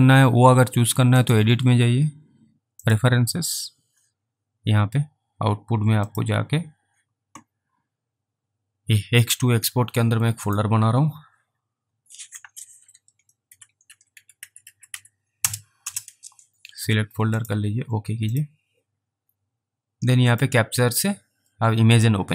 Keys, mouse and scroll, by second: 10.4 click, 13.3-15.4 typing, 15.9 Return, 17.4 click.